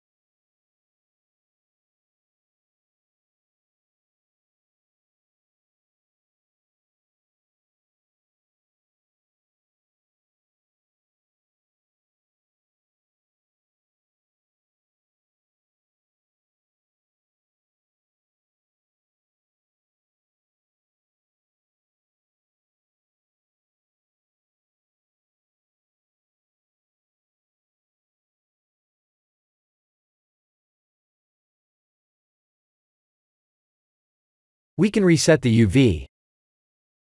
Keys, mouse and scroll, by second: 0.0 scroll down 10, 0.7 scroll down 1, 1.4 middle click, 1.4-3.5 scroll down 2, 3.5-4.1 scroll up 3, 3.9 middle click, 7.7 scroll up 2, 8.0 middle click, 12.7 scroll down 3, 13.3 shift+middle click, 14.8 click, 16.0 shift+click, 19.1 click, 21.1 click, 21.4 middle click, 22.4 middle click, 24.1 middle click, 28.0 scroll down 2, 28.5 middle click, 29.4 click, 33.5 Tab, 34.0 a, 34.8 u.